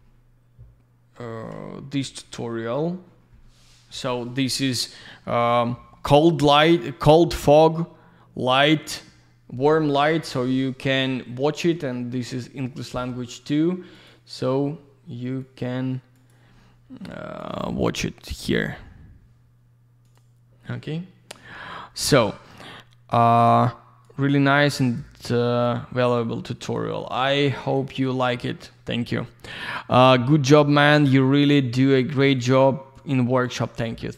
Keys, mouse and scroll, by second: 15.5 click, 16.1 click, 17.4 click.